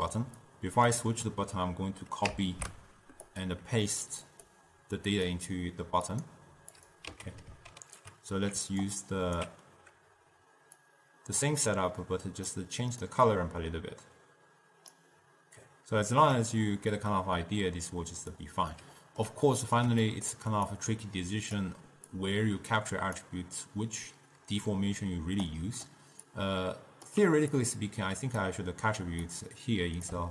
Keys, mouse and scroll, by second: 0.6 click, 2.4 ctrl+c, 3.4-7.0 drag, 7.3 x, 7.8 ctrl+v, 8.9-10.9 alt+right drag, 10.9-18.8 drag, 18.8-20.8 middle drag, 20.1-20.8 scroll down 1, 20.8 click, 22.2 click, 25.6 click, 26.6 click, 27.7-29.4 alt+drag.